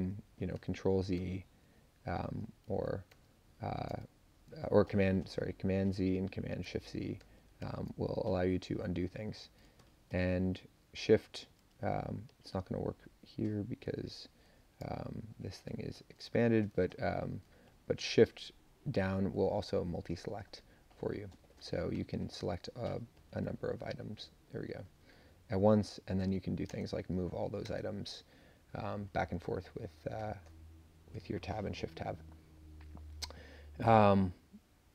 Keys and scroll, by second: 0.5 super+z, 1.1 super+z, 2.7 shift+super+z, 3.1 shift+super+z, 7.2 super+z, 7.6 super+z, 8.7 Down, 13.9 Up, 15.6 super+Down, 19.7 Up, 22.5 Down, 23.1 super+Down, 23.4 super+Down, 26.6 shift+Tab, 27.6 Tab, 30.3 Up, 30.8 Up.